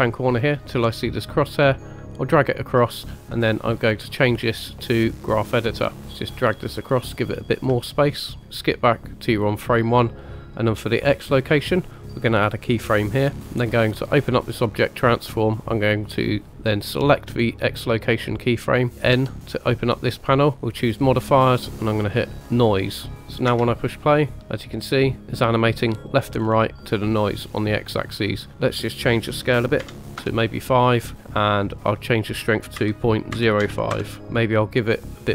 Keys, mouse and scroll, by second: 1.4-2.8 drag, 3.9-5.4 drag, 6.2 click, 7.4 scroll up 2, 7.9 shift+middle click, 8.4 click, 12.5 click, 14.1 click, 17.0 click, 18.9 n, 19.1 n, 20.6 click, 21.7-22.6 drag, 23.5 space, 26.4 scroll up 2, 26.9 scroll down 1, 28.8 click, 30.0 click, 32.0-34.0 drag.